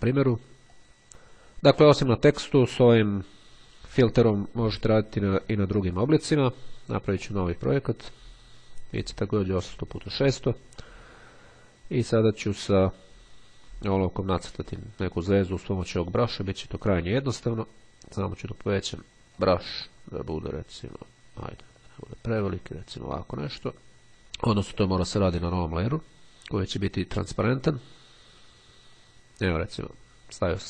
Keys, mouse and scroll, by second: 0.7 click, 7.4 click, 9.7 click, 12.6 click, 14.6 click, 18.9 click, 21.8 click, 25.5 click, 27.5 click, 29.1 click.